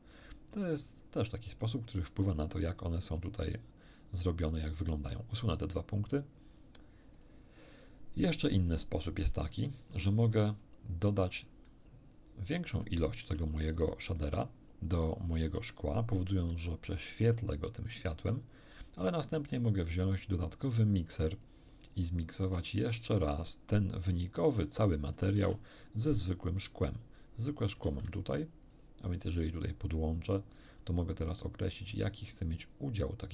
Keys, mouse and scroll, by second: 0.2 middle click, 1.2 middle click, 3.9-4.6 drag, 5.0 click, 6.0 click, 7.2 click, 8.8-9.2 scroll down 1, 9.5 middle click, 11.1 scroll down 1, 11.6-12.7 middle drag, 12.8 shift+middle click, 13.8 shift+middle click, 14.2 shift+middle click, 15.2-16.3 drag, 16.6-17.4 shift+middle drag, 18.1 middle click, 19.1 scroll down 1, 19.5 shift+middle click, 20.4-21.6 shift+drag, 21.9 click, 23.4 shift+click, 25.4 shift+d, 26.4 click, 27.6 shift+click, 27.8 shift+d, 28.6 shift+click, 29.4-30.5 shift+drag, 31.9-33.3 drag.